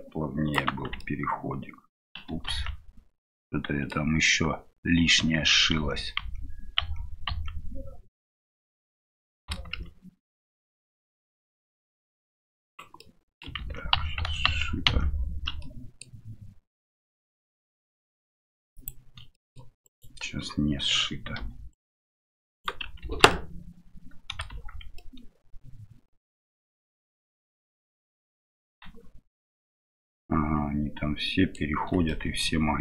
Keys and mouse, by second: 0.7 Tab, 1.0-2.0 middle drag, 2.6 ctrl+z, 3.3 middle click, 7.3 ctrl+z, 8.9 middle click, 9.8 ctrl+z, 10.3 right click, 10.7 middle click, 13.0 middle click, 13.6 ctrl+z, 14.4 ctrl+z, 14.9 ctrl+z, 15.6 middle click, 18.7 click, 19.3 middle click, 19.8 right click, 21.7-22.8 right drag, 23.0 ctrl+z, 23.3-24.4 middle drag, 24.5 shift+z, 25.0-28.1 middle drag, 30.2-31.5 middle drag, 32.1 shift+middle click.